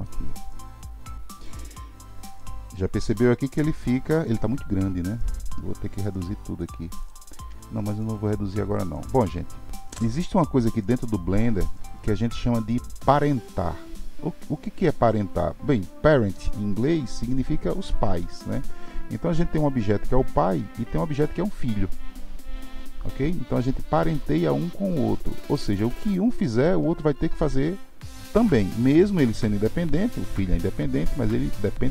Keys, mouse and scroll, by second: 0.0-2.4 middle drag, 2.4-2.9 scroll down 2, 2.9-5.9 middle drag, 6.6-7.6 shift+drag, 7.6-8.7 middle drag, 8.7 click.